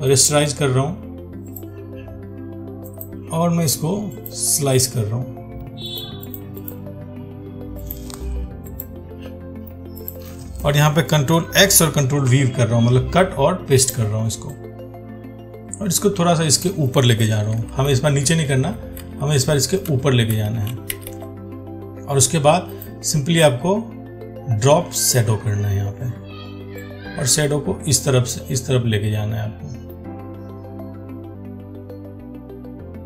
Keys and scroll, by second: 11.8 ctrl+x, 12.5 ctrl+v.